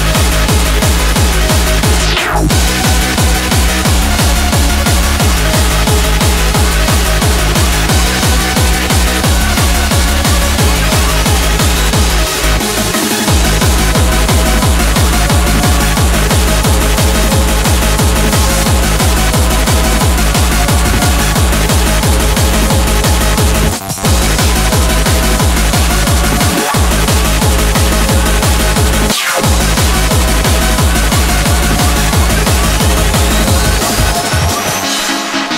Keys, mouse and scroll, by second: 4.9-8.2 middle drag, 8.2-11.5 drag, 12.5-13.7 drag, 14.2 g, 14.5 drag, 15.6 click, 17.0 a, 17.5 a, 21.2 n, 28.0-29.8 middle drag, 30.7-31.6 drag, 32.6 g, 34.2-35.5 drag.